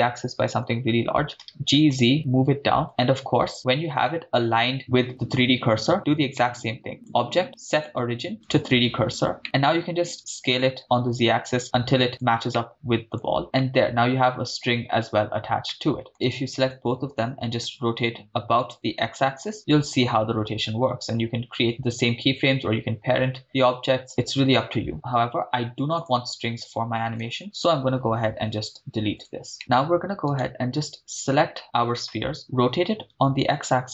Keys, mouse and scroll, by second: 0.5 Return, 1.3 g, 1.4 z, 2.9 ctrl+click, 3.6-3.9 scroll up 2, 4.1-4.6 shift+middle drag, 4.6-5.7 scroll up 3, 5.9 scroll down 1, 6.4 middle click, 7.0-8.6 drag, 9.0-9.4 scroll down 2, 9.4 middle click, 10.1 s, 10.9 z, 12.2 ctrl+click, 12.6-13.2 middle drag, 13.4 click, 13.6-14.1 middle drag, 15.7-16.1 middle drag, 16.3 shift+right click, 17.6 r, 19.3 x, 25.9-27.0 drag, 27.2 ctrl+z, 27.6-28.5 drag, 27.6 right click, 28.6 x, 30.4 right click, 32.4 r, 33.1 x.